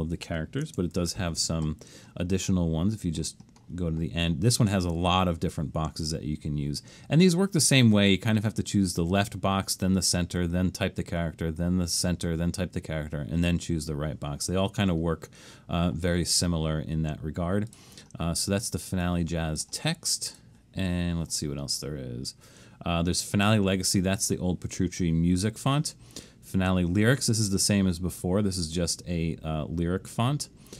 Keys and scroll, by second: 1.0 alt+shift+super+s.